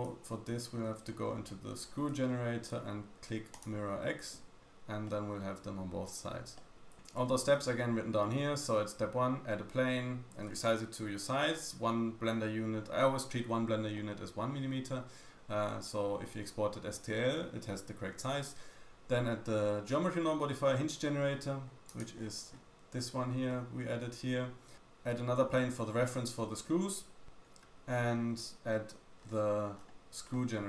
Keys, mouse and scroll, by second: 0.1 shift+middle click, 0.9-2.2 shift+scroll up 9, 2.2-2.7 shift+drag, 2.2-2.7 shift+scroll down 1, 2.7 shift+middle click, 4.6 click, 5.1 middle click, 6.6 middle click, 6.8 shift+click, 6.8 shift+middle click, 6.8 scroll down 3, 21.1-21.9 scroll down 4, 21.9 click, 22.1-23.1 scroll down 4, 23.4 middle click, 29.2-30.3 scroll up 4, 30.3 middle click, 30.3-30.6 scroll up 1.